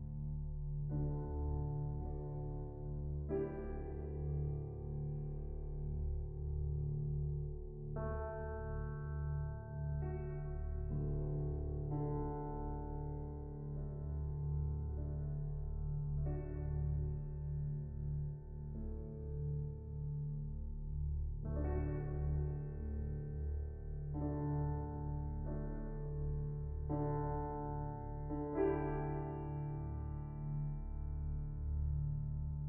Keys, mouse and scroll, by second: 3.0 scroll down 3, 3.3-4.1 scroll up 2, 4.1-6.6 shift+drag, 10.1 shift+a, 16.1-18.5 drag, 19.1-19.7 middle drag, 19.7-20.4 scroll up 1, 20.4-20.8 scroll up 1, 20.8-21.8 shift+drag, 23.4 middle drag, 23.7 scroll up 2, 23.8-24.5 shift+middle drag, 24.5 shift+click, 25.4-26.3 middle drag, 26.3-29.1 scroll up 1, 29.1-31.9 drag, 31.9-32.4 middle drag, 32.4-32.6 scroll down 3, 32.5 middle drag.